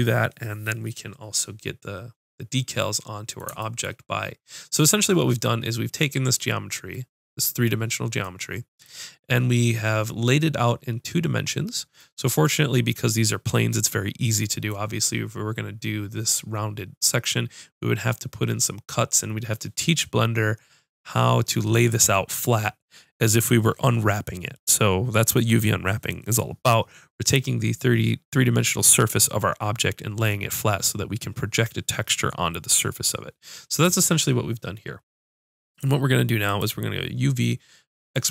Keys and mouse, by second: 0.5 ⇅, 0.7-2.9 middle drag, 3.0-6.9 middle drag, 36.4-38.3 drag.